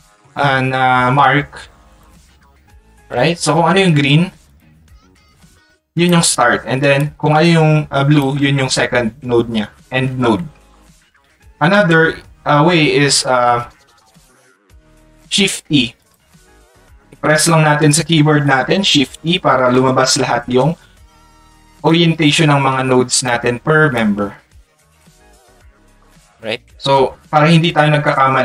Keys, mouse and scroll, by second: 1.9 click, 4.5 ctrl+click, 5.2 ctrl+click, 6.2 ctrl+click, 7.0-8.2 ctrl+drag, 19.8 shift+e, 20.4 shift+e, 24.5 shift+e, 26.5 shift+e, 27.1 click, 27.5 click.